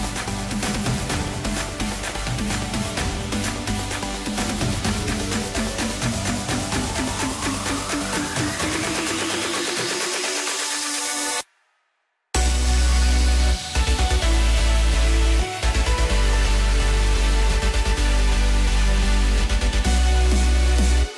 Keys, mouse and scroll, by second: 0.3-0.7 scroll up 1, 1.1 shift+click, 1.3 shift+click, 2.6 ctrl+b, 6.4-8.4 drag, 8.6-9.3 scroll down 1, 9.3-10.6 middle drag, 10.6 KP_1, 11.7 Tab, 12.9 click, 13.6 click, 14.3-15.0 scroll down 1, 15.0-16.9 middle drag, 16.9 KP_7, 18.5 g.